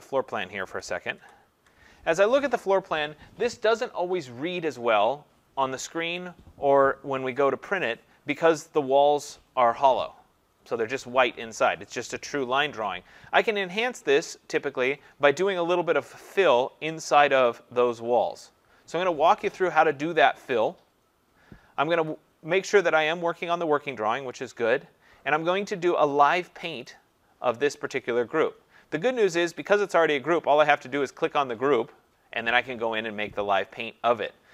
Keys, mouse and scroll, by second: 0.3 click, 1.1 ctrl+-, 22.1 click, 26.9 click, 29.7 click, 31.1 click.